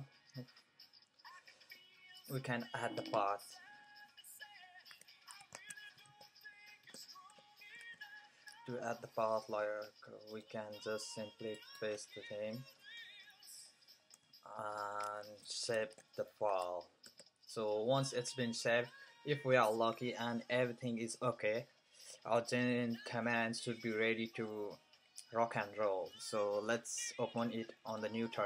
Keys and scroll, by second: 0.0-3.6 typing, 4.6-6.0 typing, 7.0-8.2 typing, 9.9-10.6 typing, 14.5 typing, 15.2 shift+Escape, 15.6-18.7 typing.